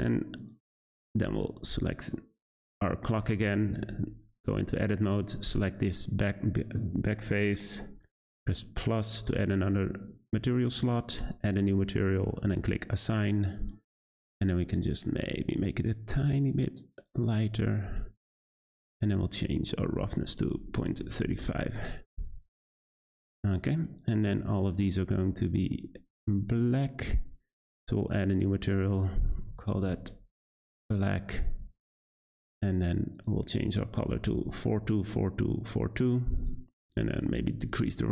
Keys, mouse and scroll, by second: 0.4 click, 1.0-1.3 scroll up 1, 1.3 click, 2.4 click, 3.2 Tab, 3.7 3, 5.0 click, 9.1-14.7 drag, 19.0-20.0 scroll down 3, 20.0-22.2 drag, 22.3 Tab, 23.5 click, 28.1-31.7 drag, 33.1 click, 37.0-38.1 drag.